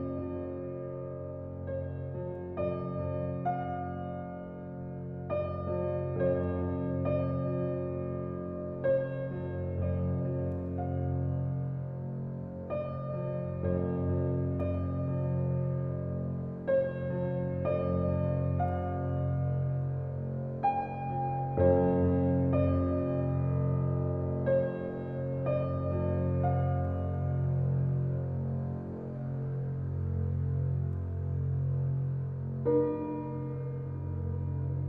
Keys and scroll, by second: 1.3 f, 23.2 ctrl+z.